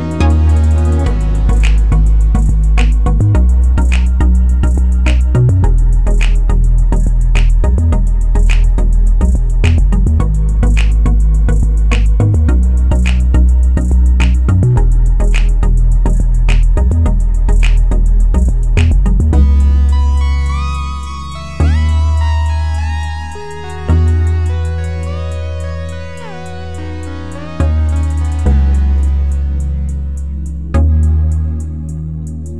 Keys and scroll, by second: 1.9 Delete, 2.2 c, 4.5 ctrl+c, 4.5 ctrl+v.